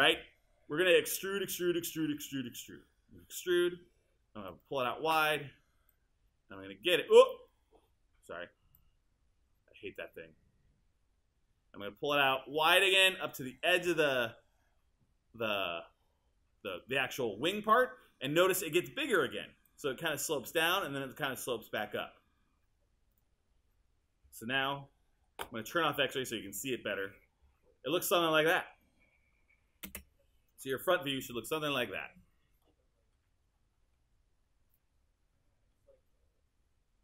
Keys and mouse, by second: 0.0 super+e, 19.7 click, 29.9 space.